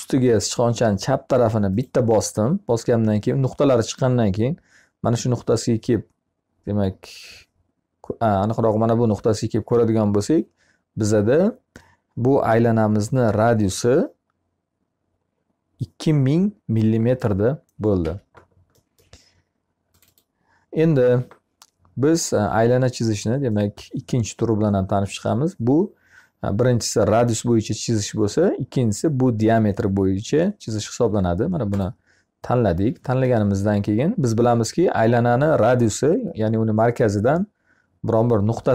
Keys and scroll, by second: 17.4 Escape, 19.8 Escape.